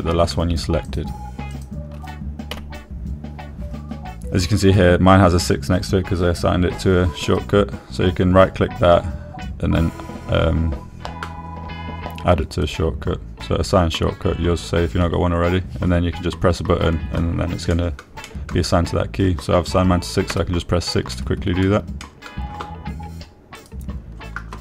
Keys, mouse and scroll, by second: 1.2 click, 3.9 m, 7.0-10.8 scroll up 1, 10.8-19.1 scroll up 1, 19.1 click, 19.6 middle click, 21.7 6, 22.6 middle click, 23.4 middle click.